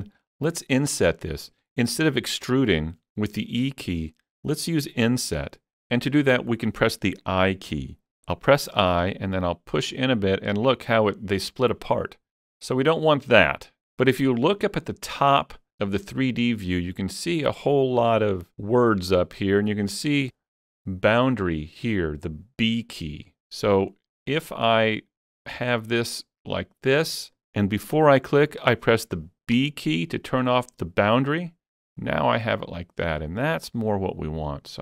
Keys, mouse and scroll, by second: 0.3 middle click, 8.1 shift+middle click, 8.1 i.